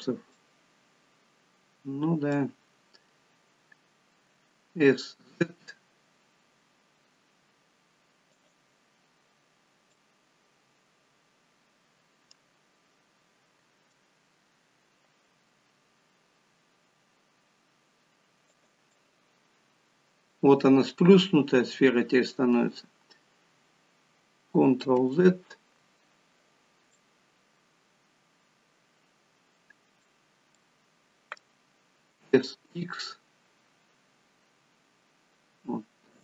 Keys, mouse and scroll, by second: 0.3 middle click, 9.9 middle click, 12.5 scroll up 3, 13.6 s, 18.9 middle click, 24.9 ctrl+z, 27.0 middle click, 30.3 scroll down 2, 30.6 middle click, 32.1 s.